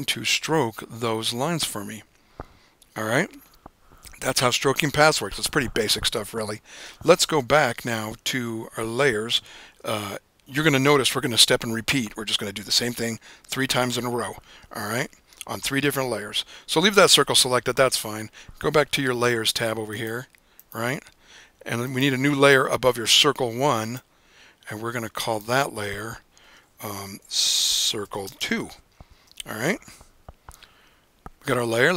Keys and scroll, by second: 27.0-29.1 typing, 29.2 Return.